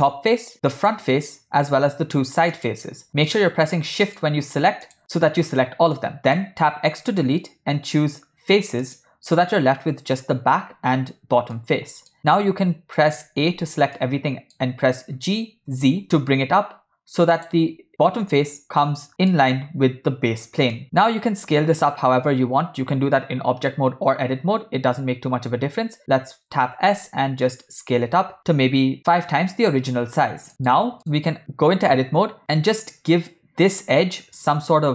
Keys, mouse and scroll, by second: 0.9 shift+click, 2.6 shift+click, 3.4 middle click, 5.0 shift+click, 6.1 middle click, 6.8 x, 11.8 middle click, 13.5 a, 14.2 middle click, 15.3 g, 19.0 middle click, 20.8 middle click, 21.4 Tab, 23.7 Tab, 25.3 Tab, 26.9 s, 28.9 ctrl+middle click, 30.5 ctrl+middle click, 30.9 middle click, 31.4 Tab.